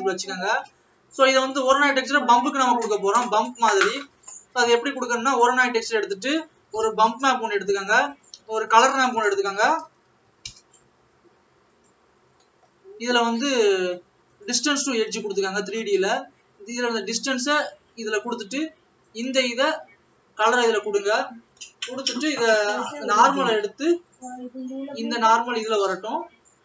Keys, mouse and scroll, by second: 8.2 click, 19.0 click, 25.0 click.